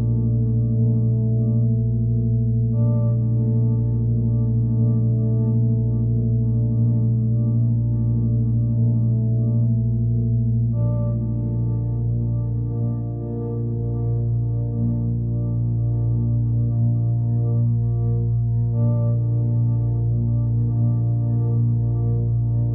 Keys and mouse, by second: 2.3 alt+middle click, 3.4-11.2 drag, 11.8-13.5 alt+middle drag, 14.3-15.9 drag, 16.4 click, 17.9 click, 19.2-19.9 drag, 20.4 click, 21.7 alt+middle drag, 22.3 shift+a.